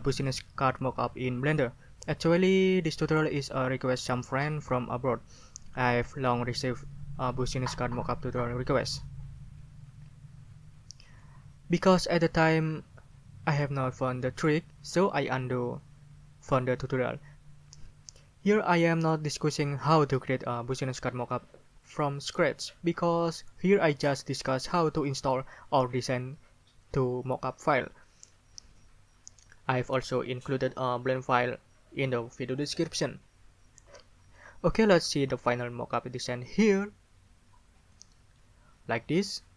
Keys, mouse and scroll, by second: 37.9 click.